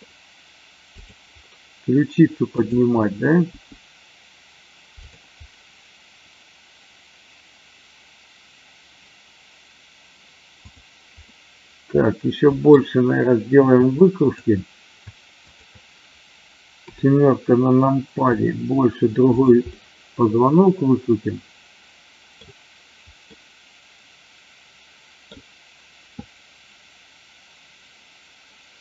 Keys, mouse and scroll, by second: 0.9 click, 2.5 click, 3.5 g, 5.0 drag, 11.1-12.8 middle drag, 14.0 shift+click, 15.4 shift+click, 18.3 r, 19.3 click, 19.7-22.4 middle drag, 23.4-25.3 middle drag.